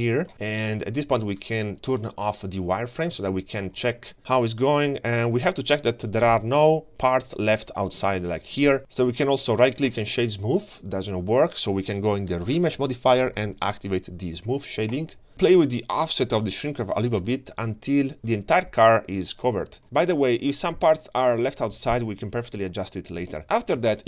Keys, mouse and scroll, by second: 2.0-3.4 drag, 3.7-4.5 middle drag, 4.9-5.8 scroll up 3, 5.8 scroll down 1, 6.2 ctrl+shift+middle drag, 6.4 ctrl+shift+scroll down 1, 6.7-7.5 scroll up 7, 7.5-8.1 ctrl+shift+middle drag, 9.2 right click, 15.0 click, 15.3-17.1 scroll down 3, 17.2-19.4 shift+drag, 19.8-20.3 shift+middle drag, 19.8 scroll down 1, 20.5-23.0 middle drag, 23.8 KP_3.